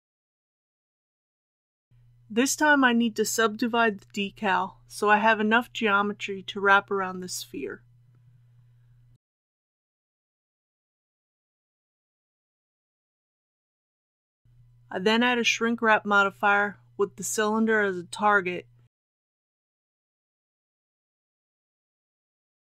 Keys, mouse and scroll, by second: 2.8 Tab, 3.9 right click, 5.2 click, 8.3 KP_2, 10.3 click, 13.7 Tab, 17.9 click.